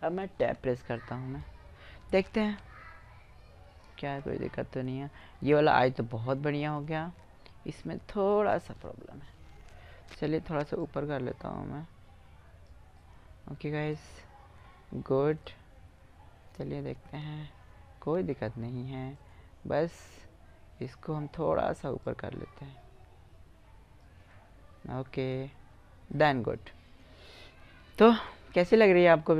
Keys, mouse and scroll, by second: 2.6 middle click, 2.9 middle click, 4.7 middle click, 8.8 Tab, 10.2-12.1 drag, 12.5-13.8 middle drag, 15.9 middle click, 16.6 Tab, 17.4 Tab, 18.5-20.0 drag, 21.4-23.3 drag, 23.7-24.2 scroll up 2, 23.8 middle click, 24.6 Tab, 26.4 middle click, 28.2 middle click, 28.4-29.2 middle drag.